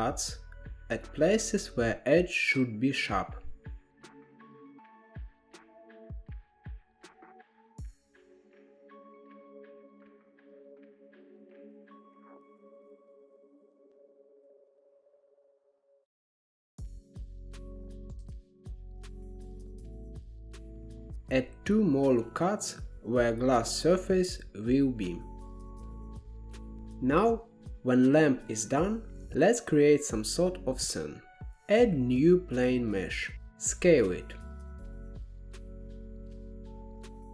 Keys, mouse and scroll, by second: 0.0 ctrl+r, 2.5 ctrl+r, 4.5 ctrl+r, 7.0 ctrl+r, 8.5 ctrl+r, 10.3 ctrl+r, 11.3 ctrl+z, 11.7 click, 12.5 s, 13.9 ctrl+r, 15.7 ctrl+r, 17.8 Tab, 18.5 alt+z, 18.6-20.1 middle drag, 21.2 KP_1, 21.6 Tab, 22.8 ctrl+r, 24.7 ctrl+r, 29.3 Tab, 29.7-30.1 middle drag, 30.1 scroll down 2, 30.5 shift+a, 32.6 s, 34.1 KP_1, 34.8 g, 36.2-37.0 middle drag, 37.0-37.3 scroll down 4.